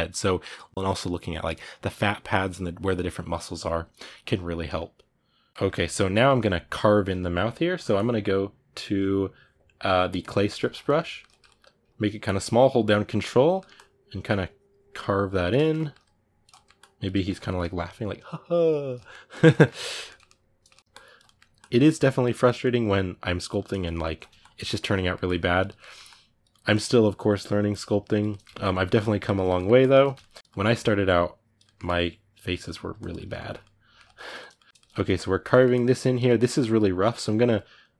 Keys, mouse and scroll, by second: 10.0 click, 10.3-12.2 ctrl+middle drag, 12.2-13.3 ctrl+drag, 13.3 ctrl+middle click, 13.5-15.4 ctrl+drag, 15.4 ctrl+middle click, 15.8 ctrl+click, 16.3 ctrl+middle click, 16.5 ctrl+click, 16.9 ctrl+middle click, 17.1-18.8 ctrl+drag, 18.8 ctrl+middle click, 19.1 ctrl+click, 19.3-20.8 ctrl+middle drag, 20.8 ctrl+click, 21.0 middle click, 21.4 ctrl+click, 22.1 ctrl+middle click, 22.4 ctrl+click, 23.3 ctrl+middle click, 24.2 ctrl+click, 24.4 ctrl+middle click, 25.0 ctrl+click, 25.4 ctrl+middle click, 25.8 ctrl+click, 26.3 ctrl+middle click, 26.5-28.1 ctrl+drag, 28.1 ctrl+middle click, 28.5 ctrl+click, 29.1 ctrl+middle click, 29.6 ctrl+click, 29.8 ctrl+middle click, 30.3 ctrl+click, 30.4 middle click, 30.5 ctrl+click, 31.4 middle click, 31.6 ctrl+click, 32.4 middle click, 32.8 ctrl+click, 32.9-34.2 ctrl+middle drag, 34.2 click, 34.3 ctrl+middle click, 34.9 ctrl+click, 35.3 middle click, 35.5 ctrl+click, 36.0-37.3 ctrl+middle drag, 37.3-37.9 drag.